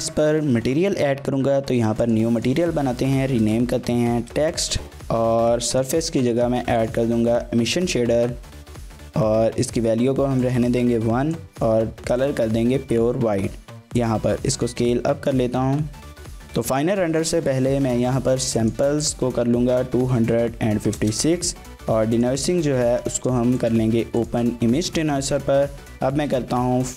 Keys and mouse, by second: 2.4-5.0 shift+drag, 5.8-6.9 drag, 10.4 click, 13.6 g, 14.0 click, 14.2 s, 16.1 click, 18.6-21.6 drag, 22.2 click, 23.2 click, 23.7-24.3 drag.